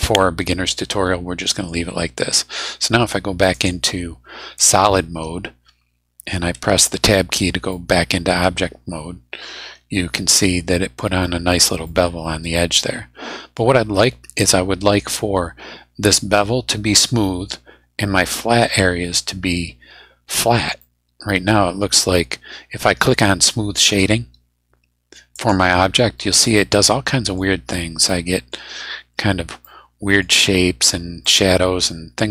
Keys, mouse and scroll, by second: 0.1-1.9 drag, 3.5 click, 4.6 click, 6.9 Tab, 7.7-11.1 middle drag, 11.3 scroll up 1, 11.8-13.7 middle drag, 20.8 middle click, 25.4 click, 26.6 middle click, 28.1 middle click, 28.5-28.8 scroll down 2, 29.0 scroll down 2, 29.6 middle click, 31.2-32.3 middle drag.